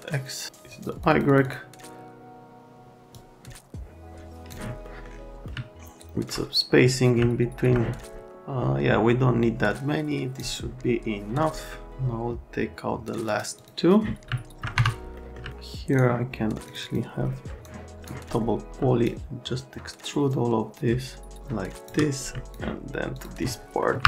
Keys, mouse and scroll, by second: 0.7 click, 0.9 click, 1.1 click, 1.3 click, 1.4 click, 3.1 click, 4.8 middle click, 5.4 middle click, 7.2 alt+middle click, 8.2 click, 11.5 middle click, 13.3 click, 13.6 click, 14.3 alt+middle click, 14.7 F3, 15.2 middle click, 15.5 alt+middle click, 15.9 click, 16.7 click, 16.8 click, 17.6 click, 19.0 shift+click, 22.4 alt+right click, 22.5 click, 23.1 click, 24.0 Delete.